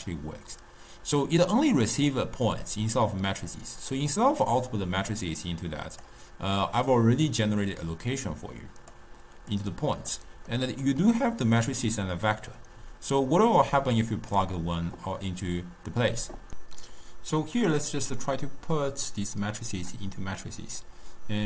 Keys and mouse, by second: 2.0 click, 4.5 click, 6.9 drag, 9.6 click, 10.6-11.7 middle drag, 11.7-14.9 drag, 17.8 click, 20.8 click.